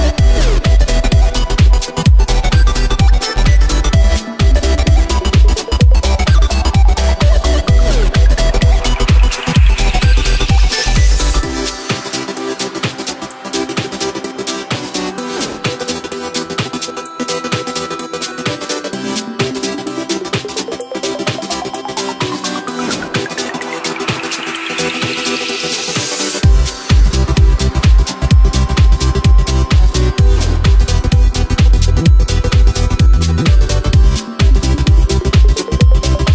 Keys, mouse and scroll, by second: 0.7 e, 4.1 shift+right click, 4.8 g, 6.9 right click, 8.1 g, 10.3 right click, 11.3 e, 16.6-17.7 middle drag, 17.7 Tab, 18.0-19.1 scroll down 1, 19.1 right click, 20.1 g, 22.3-23.2 middle drag, 23.2 right click, 24.6 right click, 25.4 right click, 25.9 right click, 26.2 right click, 26.6 Tab, 27.6 shift+right click, 28.5 KP_7, 29.9-31.0 shift+middle drag, 31.0 e, 34.6 e.